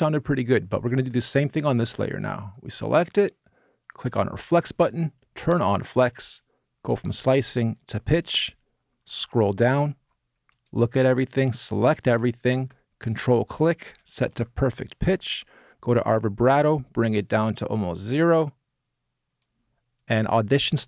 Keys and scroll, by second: 11.4 super+a.